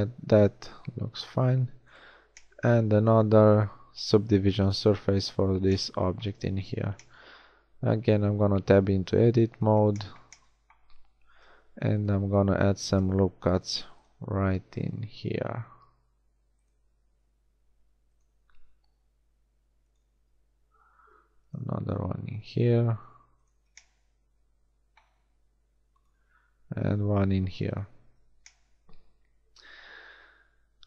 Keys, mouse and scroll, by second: 0.9 Tab, 3.6-4.2 middle drag, 6.6 Tab, 11.4 ctrl+r, 14.2 ctrl+r, 17.1 ctrl+r, 21.0 ctrl+r, 26.6 ctrl+r, 28.1 Tab.